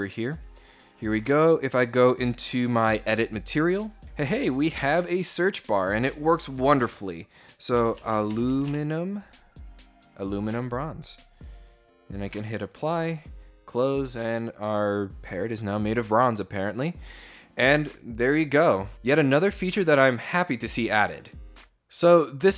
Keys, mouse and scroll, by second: 1.2 right click, 2.1 click, 4.8 click, 7.4-8.6 typing, 9.9 click, 11.0 click, 12.1 click.